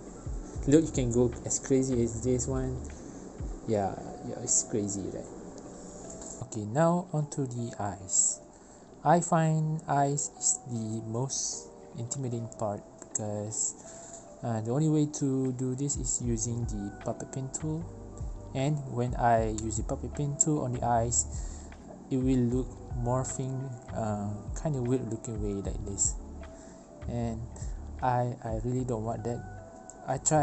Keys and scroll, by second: 0.8 space, 3.5 ctrl+z, 4.6 1, 5.3 Return, 6.1 space, 12.3 v, 20.9 v, 24.2 ctrl+z, 29.4 v.